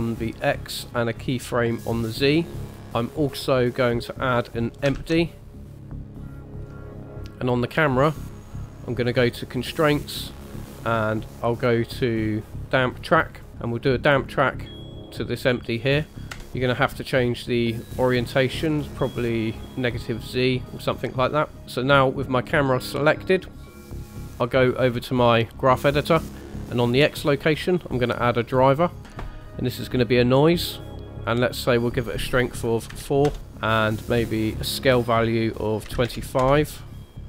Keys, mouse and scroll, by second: 2.0 click, 2.6 click, 2.6 middle click, 2.6 scroll down 1, 4.9 shift+a, 6.4 shift+middle click, 7.9 click, 9.2 click, 10.1 click, 14.1 click, 16.3 KP_0, 18.2 click, 18.7 click, 23.9 click, 26.9 click, 27.9 click, 31.7 click, 33.8 click.